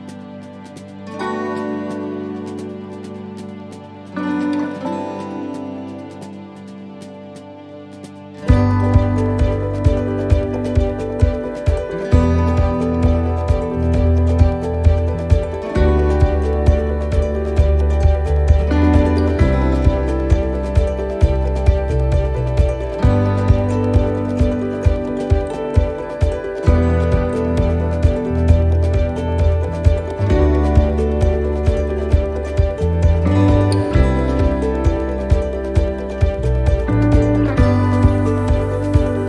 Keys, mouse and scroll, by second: 1.0 click, 4.7 click, 4.7 right click, 5.8 click, 7.7 click, 8.9 right click, 10.0 click, 11.9 click, 13.7 middle click, 14.2-14.6 scroll down 2, 14.6 middle click, 15.1-15.4 scroll down 1, 15.7 shift+middle click, 16.1-16.5 scroll up 1, 17.0 click, 18.0 middle click, 18.3-18.7 scroll down 1, 18.7 middle click, 19.1-19.5 scroll up 1, 19.6 shift+middle click, 20.1-21.1 scroll up 2, 20.4 middle click, 22.2 shift+middle click, 22.6 right click, 23.8 click, 24.6 middle click, 25.3 scroll up 1, 26.8 click, 28.0 right click, 29.4 click, 31.8 middle click, 32.7 right click, 33.3 shift+middle click, 35.0 shift+right click, 35.9 click, 37.6 middle click, 38.9 middle click.